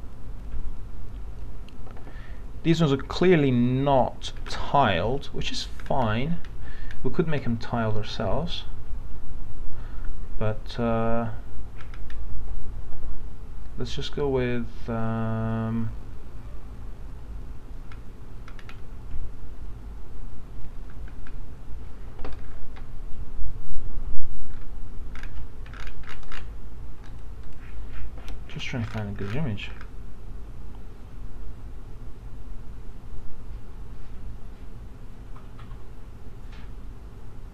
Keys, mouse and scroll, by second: 3.7 scroll up 1, 5.8 scroll down 1, 20.9 scroll up 1, 25.2 scroll down 1, 27.1 click, 28.8 scroll down 1.